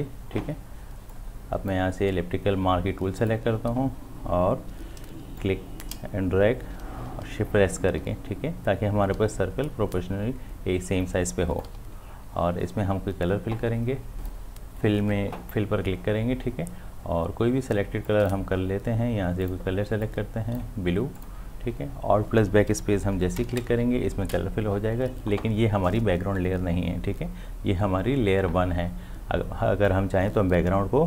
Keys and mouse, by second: 1.1-3.2 drag, 5.4-14.1 drag, 14.2 click, 18.0 click.